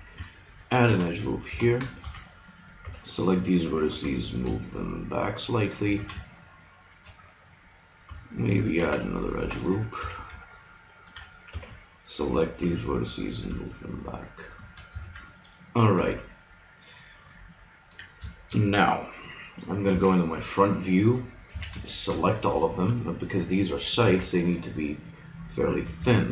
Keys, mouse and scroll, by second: 0.9 ctrl+r, 2.0 a, 2.8 b, 3.9 g, 5.8 a, 6.2 middle click, 6.6 middle click, 8.8 ctrl+r, 10.0 a, 11.5 b, 12.7 g, 12.9 middle click, 14.9 a, 15.3-16.4 middle drag, 16.6 middle click, 17.3 middle click, 19.8 middle click, 19.9 KP_1, 21.5 a, 21.8-24.1 drag, 24.1 s.